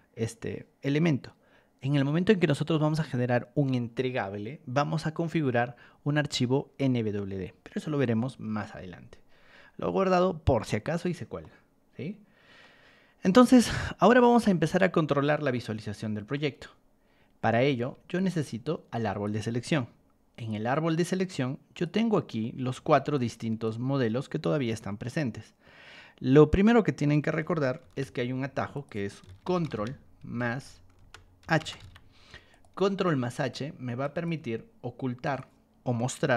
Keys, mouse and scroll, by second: 8.4 Escape, 11.4-12.6 middle drag, 15.5 middle click, 17.7 ctrl+1, 18.1 click, 18.6 ctrl+click, 19.5 Escape, 20.3 click, 21.7 click, 22.1 middle click, 22.7 ctrl+1, 23.1 click, 23.6 ctrl+click, 24.7 Escape, 27.4 ctrl+2, 27.5-31.8 typing, 28.7 click, 32.5 click, 33.5 ctrl+click, 34.3 t, 35.2 click, 36.2-36.3 typing.